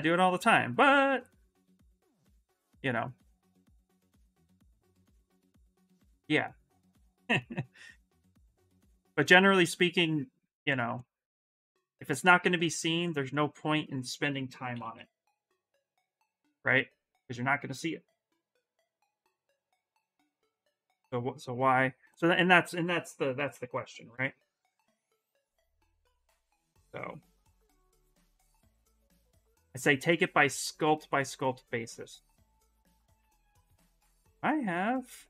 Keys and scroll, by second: 3.4-4.9 typing, 14.2-15.4 typing, 22.7-24.5 typing, 32.8 2.